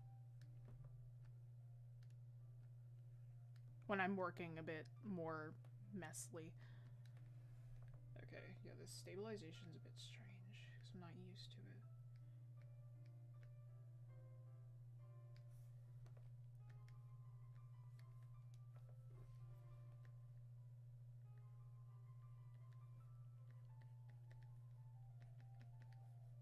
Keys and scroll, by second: 0.7 ctrl+z.